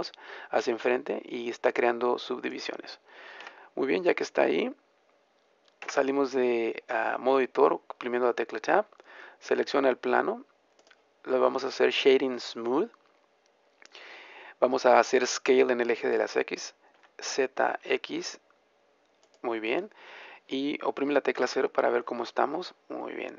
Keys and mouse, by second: 2.5-4.2 drag, 3.3 a, 5.8 Tab, 10.7-12.7 drag, 16.8 s, 21.3 KP_0, 22.7 middle click.